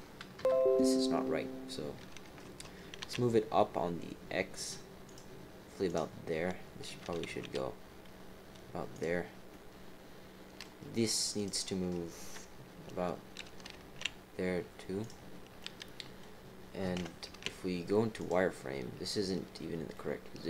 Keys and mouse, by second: 0.4 KP_3, 2.2 g, 5.8 click, 7.0 g, 9.5-10.6 drag, 9.5-10.6 right drag, 11.3 click, 12.2 KP_3, 13.4 g, 15.6 click, 15.6 middle click, 16.9 KP_7, 17.2 z, 19.9 middle click.